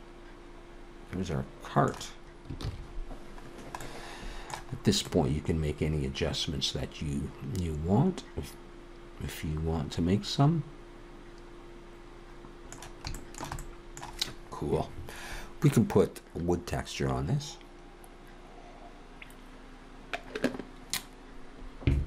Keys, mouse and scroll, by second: 2.7 ctrl+s, 3.5-4.3 scroll down 2, 3.8 middle click, 4.8-5.8 scroll up 3, 5.1 middle click, 13.2 shift+middle click, 13.6 middle click.